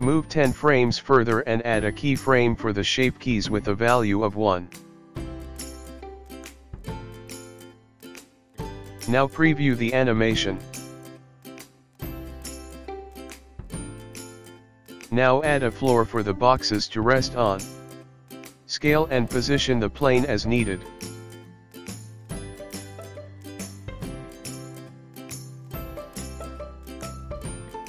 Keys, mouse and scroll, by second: 0.5 click, 3.5 click, 5.0 i, 8.8 click, 8.8 space, 12.9 middle click, 13.9 scroll down 4, 14.6 middle click, 15.8 shift+a, 18.6 s, 21.1 scroll down 3, 21.5 middle click, 21.6 click, 22.2 Tab, 23.6 s, 25.5 g, 26.0 scroll down 6, 26.5 click, 27.3 2, 27.5 click.